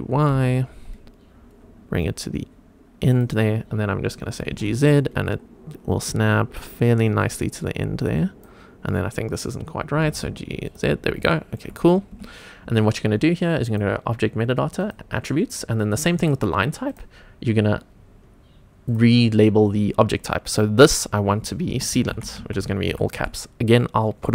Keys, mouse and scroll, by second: 0.2 g, 0.3 y, 3.1 click, 4.4 g, 4.5 z, 7.2 click, 7.6 scroll up 2, 8.2 click, 10.0 g, 10.1 z, 10.7 click, 11.0-11.3 scroll down 2, 11.3 shift+middle click, 11.8 scroll up 2, 12.2 Tab, 13.7 click, 14.8 click, 16.9 click, 18.9-24.3 drag.